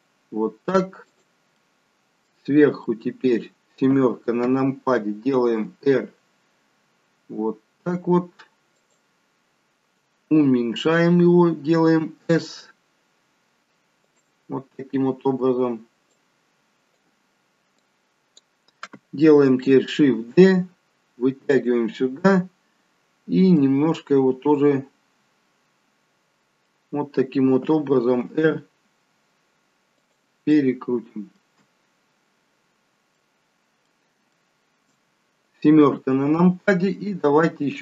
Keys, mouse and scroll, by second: 1.4 middle click, 2.8 middle click, 3.8 KP_7, 5.5 r, 12.0 s, 16.1 click, 17.7 click, 20.1 shift+d, 23.5 middle click, 28.2 r, 30.4 middle click, 31.9-32.5 scroll up 3, 32.5-33.4 scroll down 2, 33.0 middle click, 34.3 shift+middle click, 35.8 KP_7, 37.6 click.